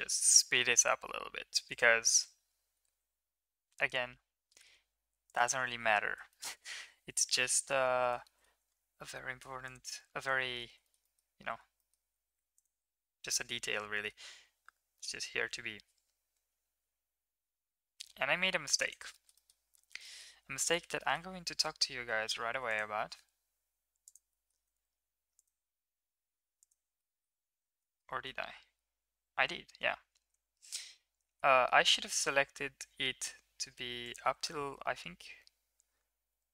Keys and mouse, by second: 2.7 g, 6.3 shift+middle click, 7.7 3, 8.2 middle drag, 9.6 click, 10.3 shift+middle click, 10.8 shift+middle click, 11.0 middle drag, 11.7 middle click, 12.5 ctrl+right click, 13.2 middle drag, 14.1 middle click, 14.4 e, 19.1-19.5 shift+middle drag, 20.2 shift+middle click, 20.8 shift+middle click, 22.5 ctrl+r, 24.3 middle click, 24.7 ctrl+r, 27.1 middle drag, 28.0 middle click, 29.9 ctrl+z, 30.4 ctrl+z, 30.7 ctrl+z, 31.6 middle click, 34.0 ctrl+click, 34.6-36.5 drag.